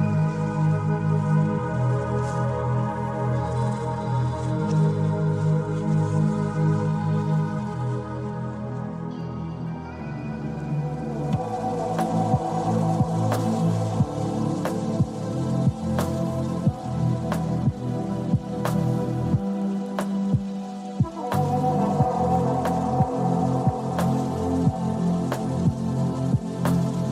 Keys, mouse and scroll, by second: 3.7 click, 6.6 click, 9.7 click, 12.0 click, 14.8 click, 15.9 click, 18.4-20.4 s, 20.5 click, 20.5 s, 20.5 s, 21.4-27.1 drag.